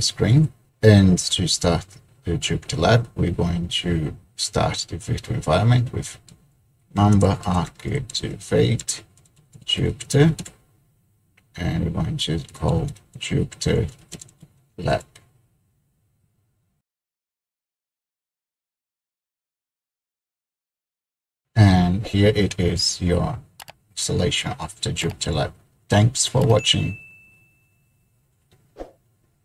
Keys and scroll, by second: 0.5 ctrl+l, 6.4-10.2 typing, 10.5 Return, 12.3-14.7 typing, 15.8-16.9 typing.